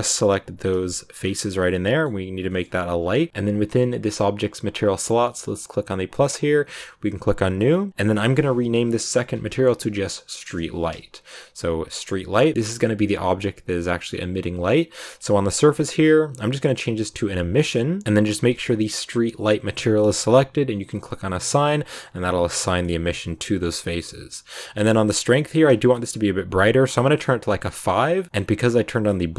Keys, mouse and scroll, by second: 0.1 shift+right click, 0.5 shift+right click, 1.1 scroll down 2, 1.3-2.8 middle drag, 2.8-3.3 scroll up 8, 5.5-7.5 drag, 7.6 click, 7.9 BackSpace, 12.2 scroll down 5, 14.5 scroll down 1, 15.4-19.2 drag, 19.9-21.4 middle drag, 21.4 click, 21.8 middle click, 22.5 scroll down 2, 22.6 middle click, 22.8 Tab, 23.0-25.6 middle drag, 25.6 click, 26.9 scroll down 2, 27.1 middle click, 27.6 scroll down 2, 27.8-29.0 middle drag, 29.0-29.3 scroll down 1.